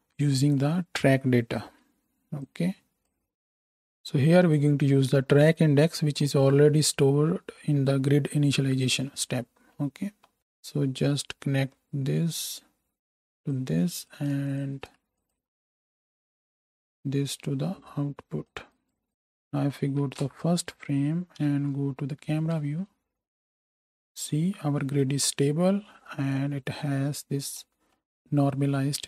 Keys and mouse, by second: 10.4 ctrl+space, 14.2 ctrl+shift+middle click, 14.6-15.3 ctrl+shift+drag, 15.1 middle click, 15.1-15.7 shift+right drag, 15.7 alt+shift+middle click, 15.8-17.0 alt+shift+drag, 16.5 x, 17.0-19.1 middle drag, 19.1 right click, 19.3 shift+click, 20.0 shift+Right, 20.2 shift+Left, 20.4 right click, 21.0-29.0 drag, 21.4 KP_Decimal, 21.4 KP_0, 22.5 space.